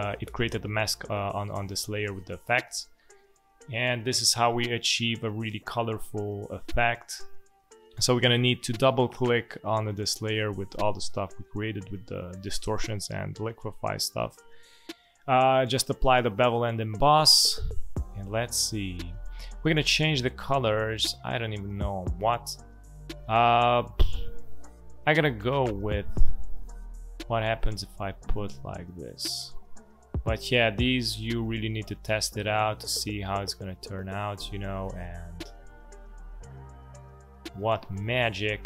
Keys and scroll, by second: 2.6 space.